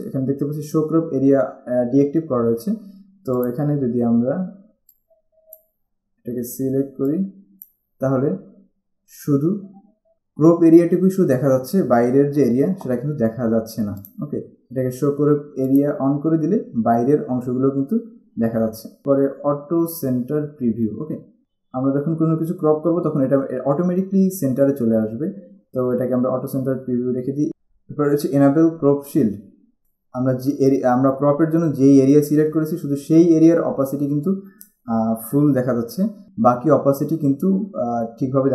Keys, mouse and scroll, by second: 3.6 click, 5.0 click, 7.2 click, 14.2 click, 15.8 click, 29.8 click.